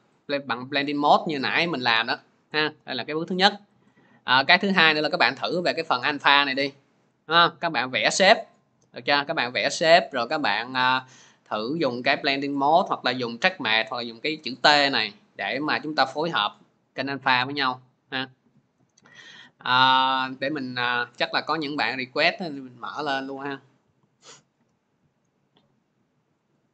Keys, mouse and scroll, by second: 3.7 click, 4.7 click, 7.5 click, 8.3 click, 9.7 click, 11.1 click, 18.6 click, 18.8 alt+Tab, 21.5 click, 23.1 click, 25.3 click, 26.6-26.7 drag.